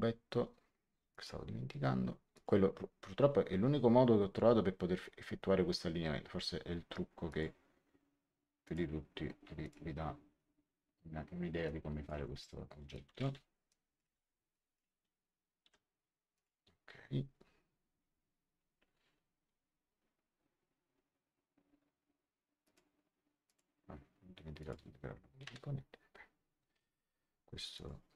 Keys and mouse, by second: 1.0 click, 2.3 click, 7.2 click, 8.6 click, 11.6 click, 11.8-14.0 typing, 12.8 click, 13.6 click, 14.4 click, 15.6 h, 16.3 click, 22.6 click, 24.5 click, 25.4 Return, 25.4 KP_Enter, 26.7 right click, 27.7 click.